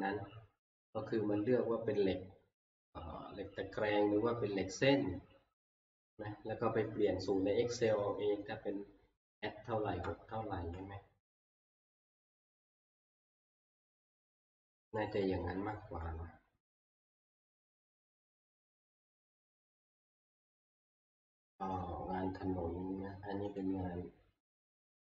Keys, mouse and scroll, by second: 0.6 scroll, 1.3 scroll, 3.9 click, 4.4 middle click, 7.4 click, 8.9-18.0 drag, 17.5 ctrl+Page_Down, 17.8 ctrl+Page_Down, 18.1 ctrl+Page_Down, 19.1 ctrl+Page_Down, 21.9 click, 21.9 scroll down 2, 22.1 scroll, 23.6 click, 23.9 scroll.